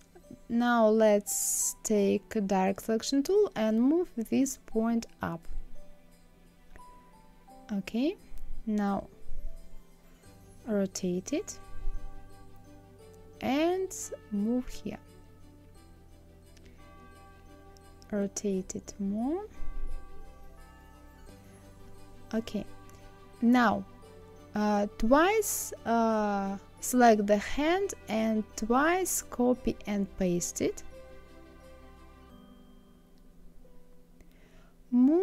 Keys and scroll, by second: 32.8 ctrl+c, 33.3 ctrl+f, 33.7 ctrl+c, 34.2 ctrl+f.